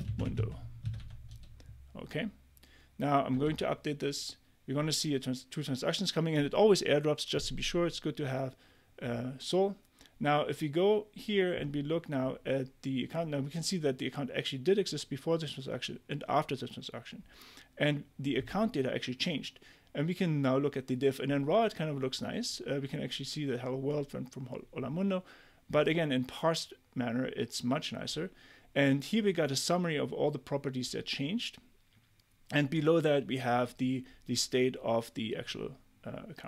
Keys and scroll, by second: 0.0-1.8 typing, 3.3 Return.